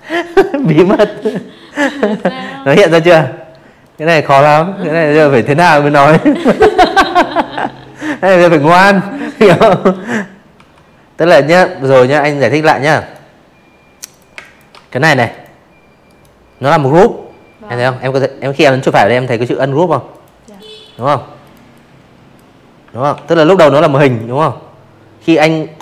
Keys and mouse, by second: 0.7 click, 7.5 v, 8.1 click, 9.0 click, 9.9 right click, 11.0 click, 11.3 space, 11.4 click, 11.7 v, 11.8 click, 12.2 click, 13.0 right click, 17.0 click, 17.4 click, 17.8 click, 18.4 click, 18.6 click, 20.0 ctrl+g, 20.4 click, 20.9 click, 23.5 ctrl+shift+o, 24.5 v, 24.6 click, 24.8 space, 24.8 click, 25.2 v, 25.3 click.